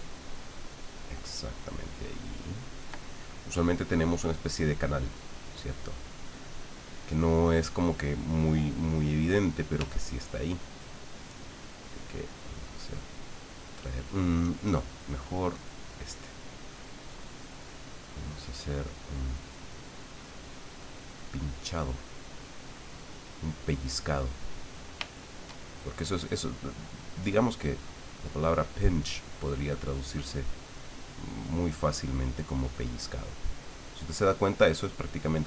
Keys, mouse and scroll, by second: 3.1-5.1 ctrl+middle drag, 5.7 click, 6.5 click, 7.3 middle click, 9.7 f, 10.7 click, 11.6-12.7 drag, 12.9 click, 14.4 click, 15.5 click, 16.8-18.6 drag, 20.8-22.8 drag, 23.7 click, 24.3 click, 25.1-26.1 shift+drag, 26.9 click, 27.9 click, 28.7 click, 29.5 click, 30.3 click, 31.3 click, 32.0 click, 32.7 click, 33.2 click, 34.0 click, 34.6 click.